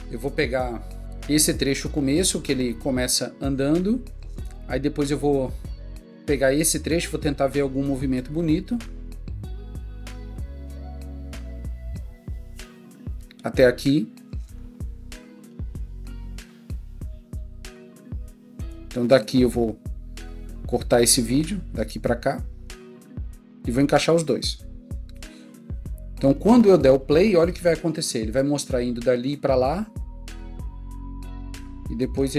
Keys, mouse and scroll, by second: 7.8 click, 8.0 click, 23.8-24.6 drag.